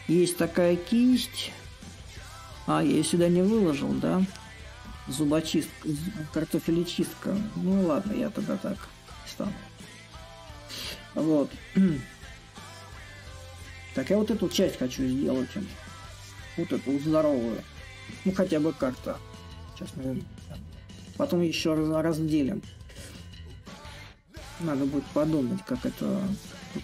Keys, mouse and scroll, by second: 0.7-5.8 drag, 6.4-15.7 drag, 15.7-22.0 middle drag, 22.0 click.